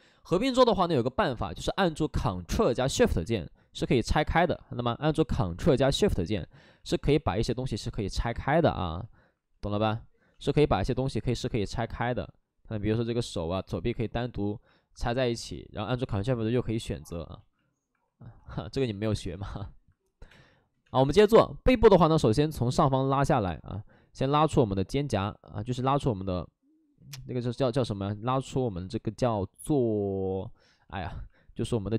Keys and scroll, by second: 4.3 ctrl+z, 5.5 ctrl+z, 6.7 ctrl+z, 7.3 shift+f, 7.6 shift+f, 15.1 ctrl+w, 15.1 shift+f, 19.0-20.8 typing, 22.2 ctrl+z, 28.6 ctrl+z.